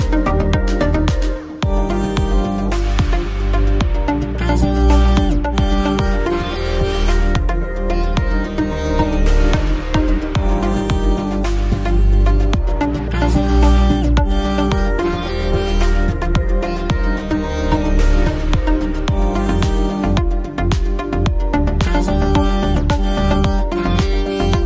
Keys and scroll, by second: 15.6 p, 17.0 ctrl+a, 17.1-19.1 typing, 20.5-24.6 typing.